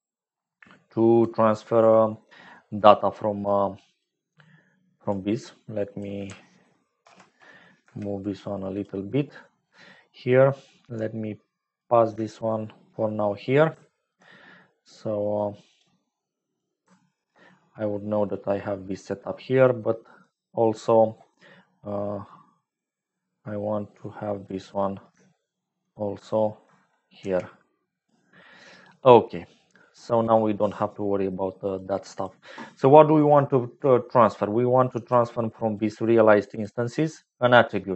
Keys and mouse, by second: 3.3 click, 4.4 click, 5.3 click, 6.9 ctrl+j, 7.8 g, 10.5-12.0 drag, 12.4 shift+click, 13.8 ctrl+right click, 15.8 click, 16.9 ctrl+right click, 18.3-20.1 drag, 20.7 middle click, 22.7-24.6 drag, 25.4 shift+click, 26.2 ctrl+click, 27.1 g, 28.8 click, 31.7 click, 34.7 click, 35.7-36.8 drag.